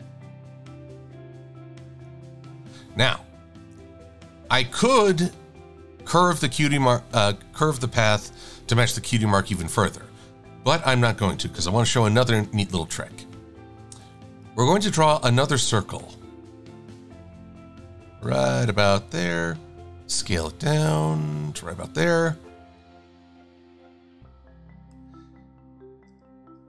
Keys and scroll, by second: 12.2 v, 19.0 v.